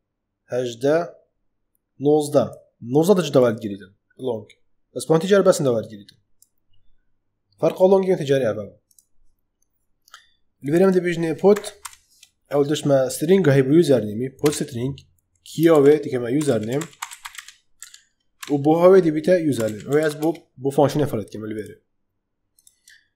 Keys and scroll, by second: 11.4 p, 11.7 u, 14.3 Return, 15.6-20.4 typing.